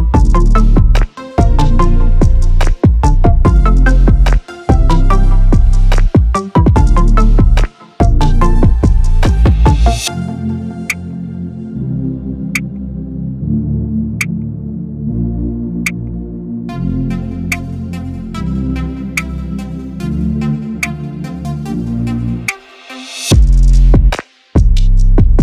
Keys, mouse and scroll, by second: 0.1 shift+click, 1.9 click, 7.6 ctrl+scroll, 9.1-10.7 drag, 16.9 click, 20.0 click, 22.5 click.